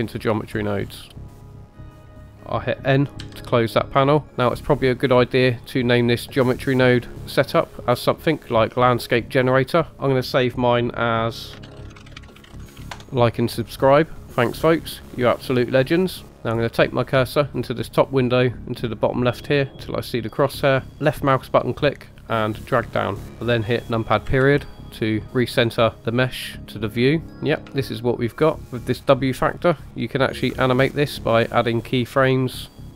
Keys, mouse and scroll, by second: 1.3 middle click, 1.4 click, 2.1 typing, 9.9-13.0 drag, 21.1-22.2 drag, 23.2 click, 23.3 shift+middle click, 23.3 scroll down 2, 24.2 KP_Decimal, 25.2 middle click, 27.3 middle click, 27.3 scroll up 2, 27.8 shift+middle click, 32.5-32.9 shift+drag.